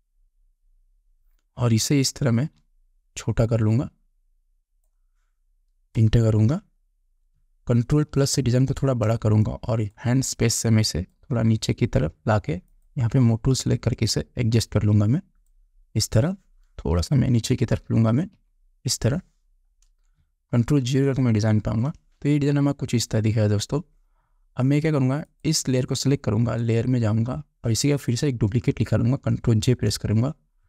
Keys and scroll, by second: 6.4 Return, 8.6 ctrl+=, 9.6 space, 17.4 Down, 21.3 ctrl+0, 30.1 ctrl+j.